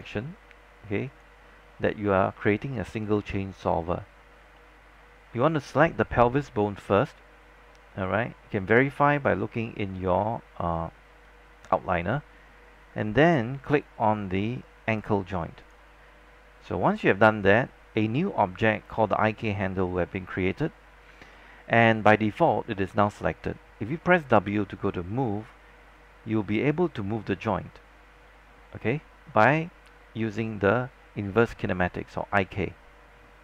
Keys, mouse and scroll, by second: 4.2-4.5 scroll up 1, 4.7 alt+middle click, 5.1 scroll up 1, 5.6 alt+click, 24.6 w, 26.1-33.4 drag.